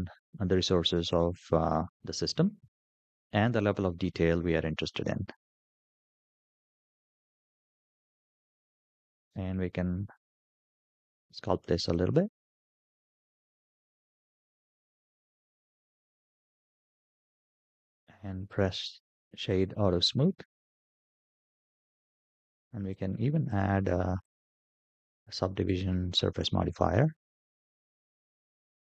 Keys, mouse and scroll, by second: 0.2-1.4 middle drag, 1.9 scroll up 3, 2.2 shift+middle click, 2.8-3.4 scroll down 2, 3.6 shift+middle click, 5.6 click, 6.8 click, 8.6-8.9 scroll up 3, 9.1 shift+middle drag, 9.3 shift+click, 9.5 scroll down 1, 10.8-11.7 drag, 12.7-13.9 drag, 14.0 shift+middle click, 14.1-15.8 drag, 15.9 shift+middle click, 16.1 click, 16.8 click, 17.4-19.4 right drag, 19.3 click, 20.1-20.6 shift+middle drag, 20.9-21.8 middle drag, 22.0 shift+middle drag, 23.3 click, 24.0 click, 24.3-25.6 drag, 28.0 click, 28.7-28.8 middle drag.